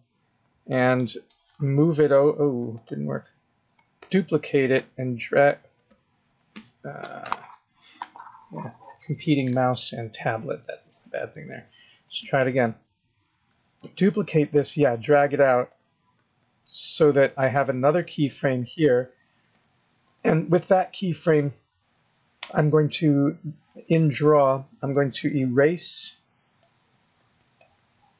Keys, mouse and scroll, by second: 1.3 g, 3.8 shift+d, 4.6 g, 13.6 shift+d, 15.5 click, 26.4 shift+click.